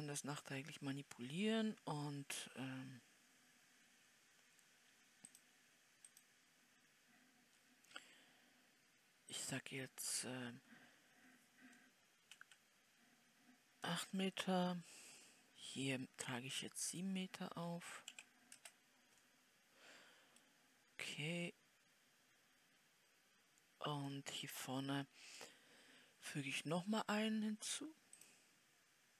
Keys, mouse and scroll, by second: 24.8 scroll down 2.